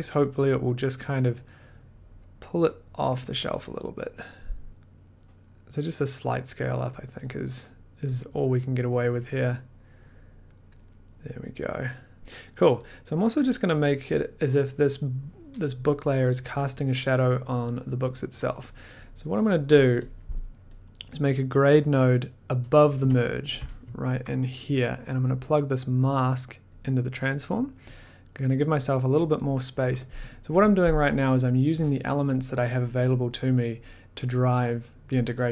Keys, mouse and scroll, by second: 0.6 click, 5.2 Up, 5.2 click, 5.2 t, 7.0 click, 8.1 click, 12.9 click, 19.5 middle click, 20.1 click, 20.8 click, 21.1 click, 22.0 click, 23.0 click, 23.0 g, 24.1 ctrl+click, 26.6 click, 27.6 middle click, 28.0 scroll, 28.2 click, 29.1 click, 29.4 click, 29.9 click, 32.3 click.